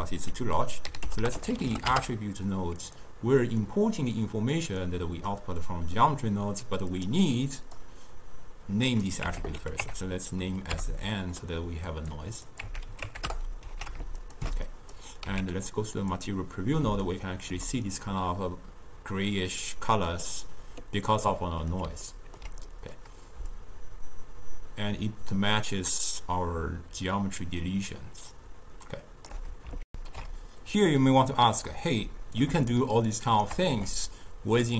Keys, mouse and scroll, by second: 7.7-12.2 drag, 14.3-16.4 ctrl+shift+drag, 16.4 z, 17.3-23.7 shift+middle drag, 23.7-26.6 shift+drag, 29.9 ctrl+alt+shift+q, 32.1-33.2 middle drag, 33.2 shift+right click, 33.8 g.